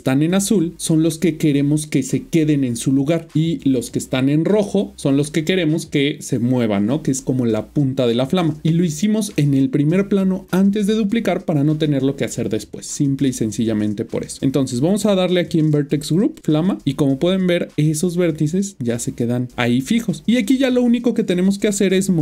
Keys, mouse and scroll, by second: 15.4 click, 16.4 click.